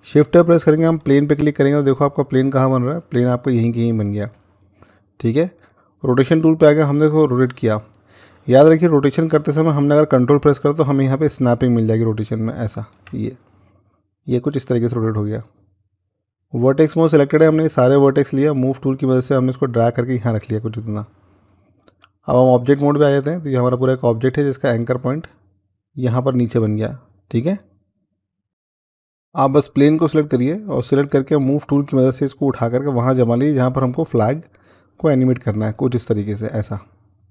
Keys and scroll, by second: 28.5 z.